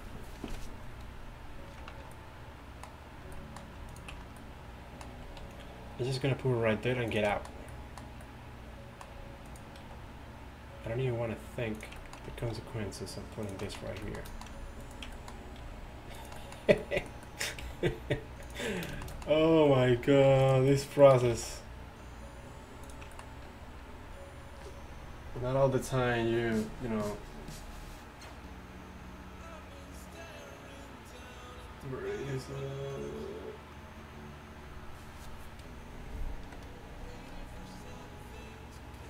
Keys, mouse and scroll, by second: 3.9 middle click, 5.3 alt+s, 7.4 click, 9.5 middle click, 9.9 alt+s, 12.4 alt+s, 14.4 alt+s, 16.0 g, 17.7 g, 20.7 ctrl+r, 21.4 alt+s.